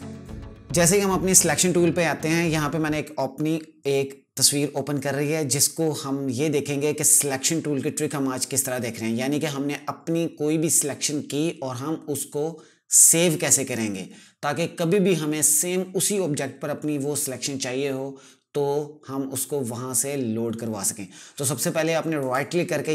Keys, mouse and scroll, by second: 21.5 right click.